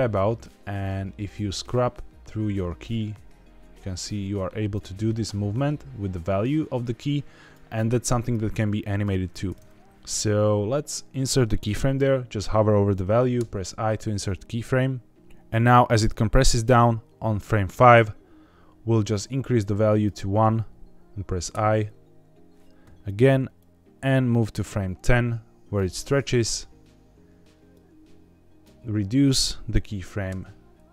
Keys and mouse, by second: 0.7-4.6 drag, 5.7-7.4 drag, 8.2 click, 15.2-17.6 drag, 19.0 click, 21.4 i, 23.5-25.7 drag, 27.6 click.